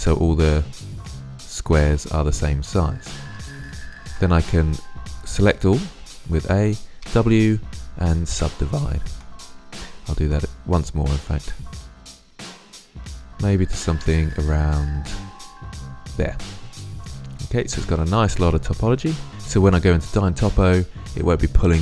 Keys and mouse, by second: 3.8 middle click, 3.9 w, 5.3 a, 5.5 a, 6.7 w, 9.0 middle click, 9.8 w, 12.6 click, 16.2-17.3 middle drag, 18.0-18.6 drag.